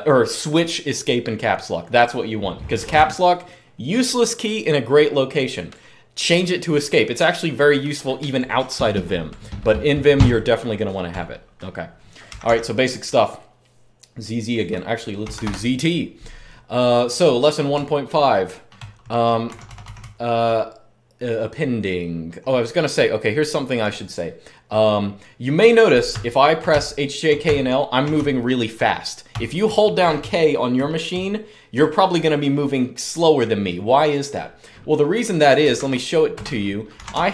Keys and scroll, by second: 12.0 typing, 14.7-15.7 typing, 17.5-20.6 typing, 25.6-31.2 typing, 35.5 super+2, 36.1 super+Return, 36.4-37.3 typing.